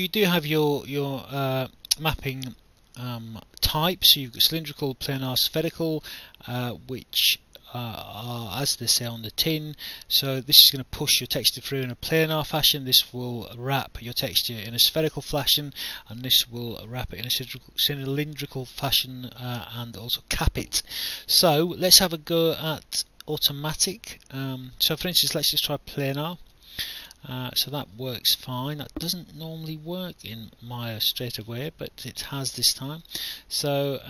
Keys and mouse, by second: 26.1 click, 28.6 alt+click, 32.6 alt+click, 33.9 click.